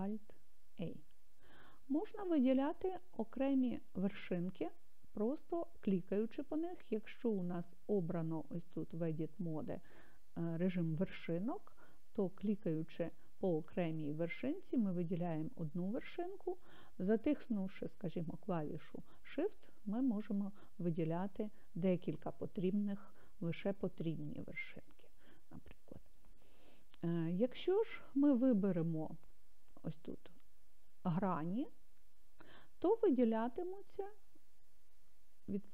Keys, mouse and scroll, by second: 0.0 alt+a, 2.1-3.1 scroll up 2, 3.1-3.7 scroll down 1, 11.9 click, 13.4 click, 14.4 click, 15.1 click, 16.5 click, 19.5 shift+click, 20.1 shift+click, 21.0 shift+click, 21.5 shift+click, 22.1 shift+click, 23.5 shift+click, 24.0 shift+click, 24.7 shift+click, 30.7 click, 35.3 click.